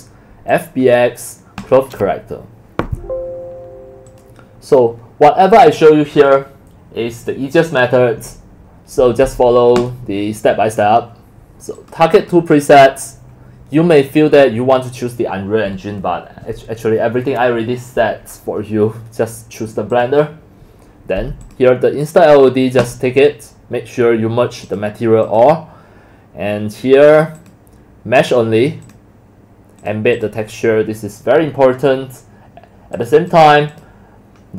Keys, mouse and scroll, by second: 5.0 click, 11.2 click, 19.9 click, 21.4 click, 22.8 click, 24.7 click, 27.4 click, 32.0-32.4 scroll down 2, 33.0 click, 33.3 click, 33.7 click.